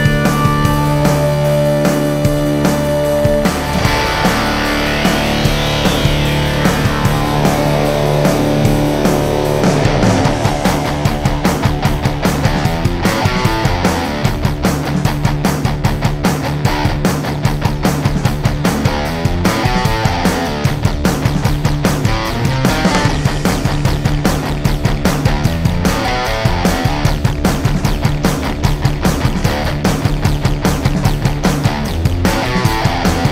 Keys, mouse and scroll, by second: 0.5-2.9 drag, 3.2 click, 5.7 right click, 7.0 click, 9.7 right click, 12.0 click, 13.4 click, 16.9-17.2 typing, 21.0 click, 23.3 click, 26.4 right click, 28.6 click.